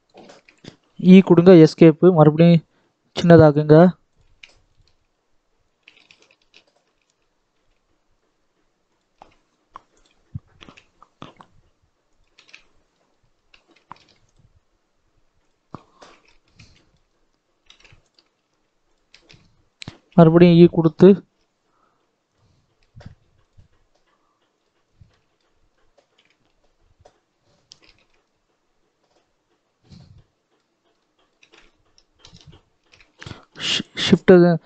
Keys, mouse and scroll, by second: 0.1 shift+middle click, 0.9 e, 1.8 click, 2.6 s, 3.4 alt+a, 4.1 click, 4.2 alt+a, 5.6 s, 9.1 alt+a, 9.9 click, 10.5 alt+a, 12.0 click, 12.3 alt+a, 13.9 ctrl+r, 15.5-16.1 scroll down 5, 16.2 right click, 16.2 shift+middle click, 16.6 shift+middle click, 16.9-17.6 scroll up 4, 17.6 alt+a, 17.9 alt+click, 18.3 s, 19.1 right click, 19.1 shift+middle click, 19.3-19.9 scroll down 4, 19.9 e, 22.4 scroll down 3, 22.7 right click, 22.7 shift+middle click, 24.6 right click, 24.6 shift+middle click, 24.7 scroll down 2, 24.9-26.1 right drag, 24.9 middle click, 26.1 KP_1, 27.3-27.7 scroll up 4, 27.7 shift+middle click, 28.1-30.1 scroll up 1, 30.1 middle click, 30.7 scroll up 2, 30.9 middle click, 31.3 alt+a, 32.2 alt+click, 34.1 shift+s, 34.4 middle click.